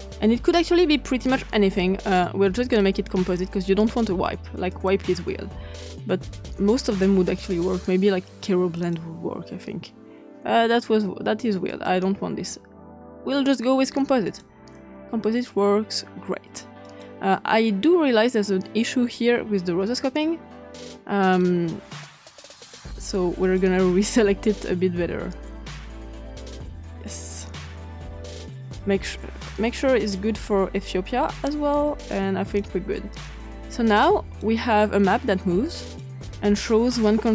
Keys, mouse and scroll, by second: 2.2 click, 4.6 click, 5.3 click, 5.5-8.7 scroll up 3, 8.7 click, 11.6 click, 13.3 scroll down 2, 14.2 click, 16.8 click, 20.1 click, 21.2 click, 23.4 click, 25.2-27.2 drag, 29.7-32.6 drag, 33.1 click, 33.6 click, 35.8 click.